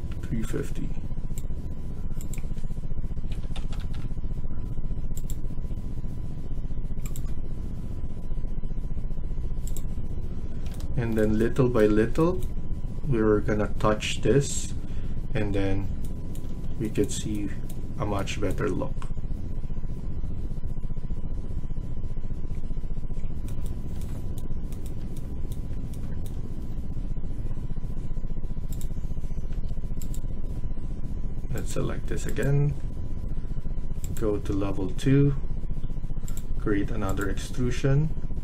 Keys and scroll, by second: 3.2-4.1 typing, 10.4 Escape, 29.4 Escape.